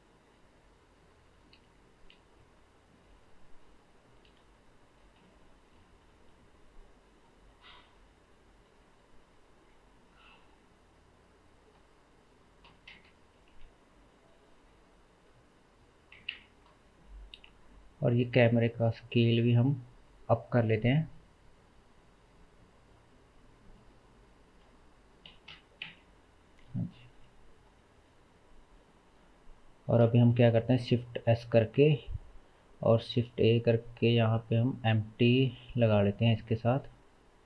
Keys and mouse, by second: 2.2 KP_Decimal, 4.3 KP_Decimal, 10.0-11.8 shift+middle drag, 11.8-30.0 drag, 13.1 KP_0, 30.3 shift+s, 33.1 shift+a, 36.3 s.